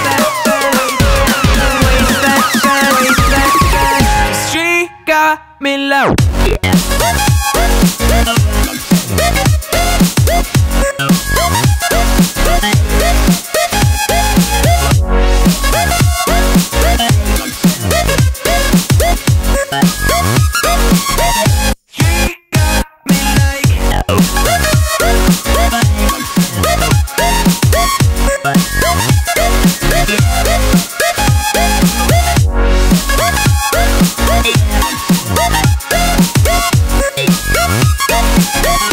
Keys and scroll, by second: 37.5 alt+space.